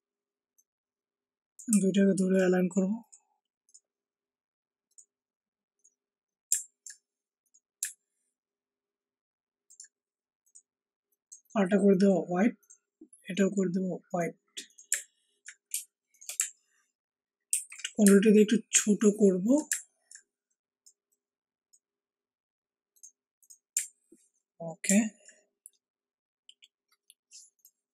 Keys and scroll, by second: 17.4 ctrl+alt+shift+t, 18.0 ctrl+alt+shift+t.